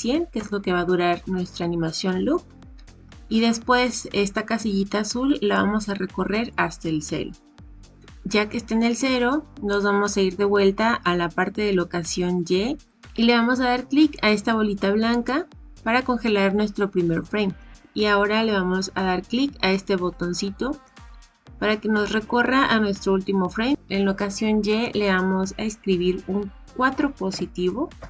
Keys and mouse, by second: 5.5-7.0 drag, 15.1 click, 20.9 click, 24.8-28.0 drag.